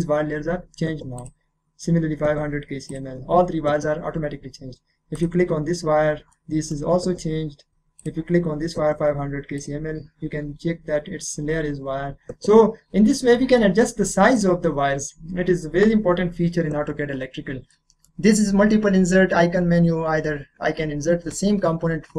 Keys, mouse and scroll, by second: 1.2 click, 2.9 click, 4.1-5.2 scroll down 1, 5.2 click, 6.1 scroll down 1, 6.3 middle click, 7.0-8.0 scroll up 1, 8.0 click, 9.6 click, 12.7 click, 12.7 scroll up 1, 13.0 scroll down 1, 13.3 middle click, 14.3 click, 17.7 middle click.